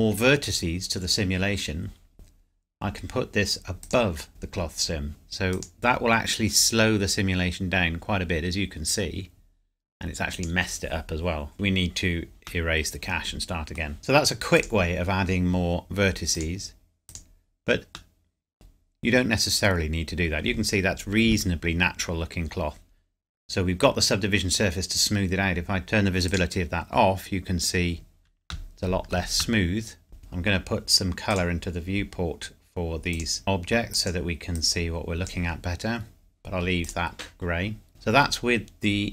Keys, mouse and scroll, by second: 3.8 click, 5.5 click, 10.3 click, 11.5 shift+middle click, 12.6 middle click, 14.6 click, 18.1 middle click, 18.8 scroll up 1, 25.8 click, 27.3 scroll up 1, 28.7 shift+middle click, 29.6 shift+middle click, 30.2 shift+click, 31.7 shift+scroll down 1, 33.1 shift+click, 37.9 shift+middle click.